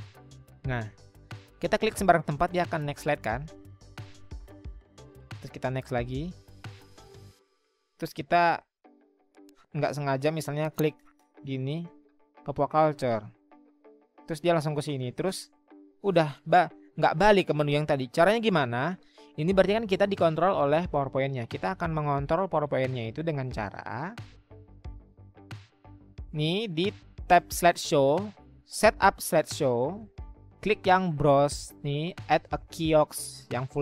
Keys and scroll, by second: 21.0 Escape.